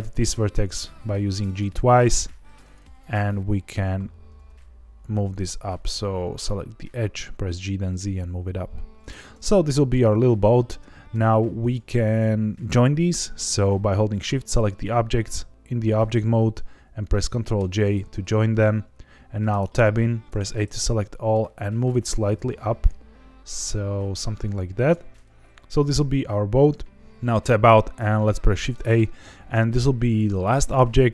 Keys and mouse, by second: 1.4 click, 2.3 2, 2.7 click, 3.7 g, 3.8 z, 8.9 click, 9.2 middle click, 10.7 Tab, 11.7 shift+click, 17.5 ctrl+j, 19.5 Tab, 20.2 a, 20.6 middle click, 22.3 g, 22.4 z, 24.7 click, 25.1 middle click, 27.1 Tab, 28.5 middle click, 28.8 shift+a.